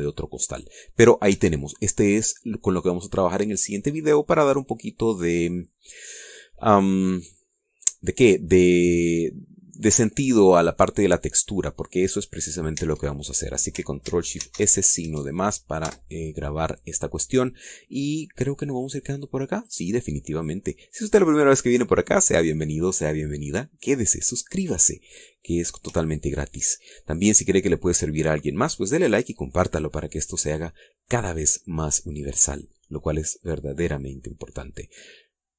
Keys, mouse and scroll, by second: 0.4 Tab, 0.7 click, 1.7-2.0 scroll up 2, 2.1 scroll down 2, 2.3 Tab, 13.8 Tab, 15.4 ctrl+shift+s, 16.1 ctrl+shift+KP_Add, 16.9 KP_Enter, 19.9 click, 20.6 click, 22.0-22.3 scroll up 1, 23.0-26.9 middle drag, 27.1 shift+middle click.